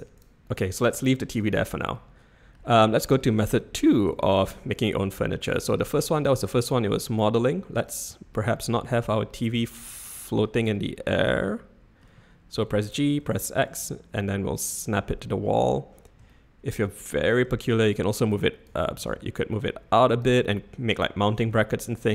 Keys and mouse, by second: 0.1 click, 0.5 click, 2.1-2.5 middle drag, 2.9 shift+middle drag, 3.4-3.9 middle drag, 4.2-4.5 shift+middle drag, 4.7-5.3 middle drag, 5.9 middle click, 8.5-8.9 shift+middle drag, 10.0 middle click, 11.2-12.0 middle drag, 12.7 g, 16.3-16.7 shift+middle drag, 17.8 shift+click, 19.0 ctrl+z, 19.6 click, 21.3 ctrl+z.